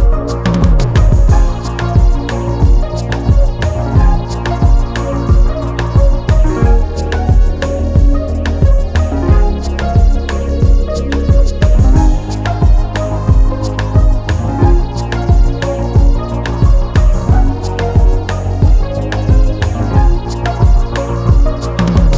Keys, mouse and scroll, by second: 1.1 scroll down 1, 1.5 click, 3.3 scroll up 1, 3.7 click, 9.2 scroll up 1, 9.6 click, 12.7 scroll down 1, 13.8 click, 15.9-16.3 scroll down 1, 16.3 click, 20.9 click, 21.7 scroll up 1.